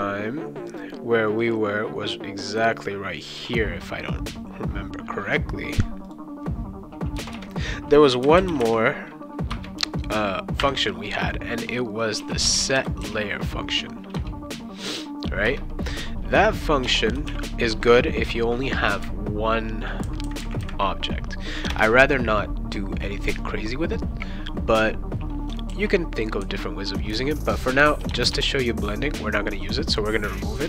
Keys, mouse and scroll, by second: 0.7 click, 6.0 click, 7.2 Return, 7.3 Return, 8.0-9.1 typing, 9.5 Return, 10.6 ., 11.9-14.2 typing, 15.4 Return, 16.3-17.7 typing, 21.7 BackSpace, 25.7 ctrl+s, 27.8 BackSpace, 28.1 BackSpace, 28.3 BackSpace.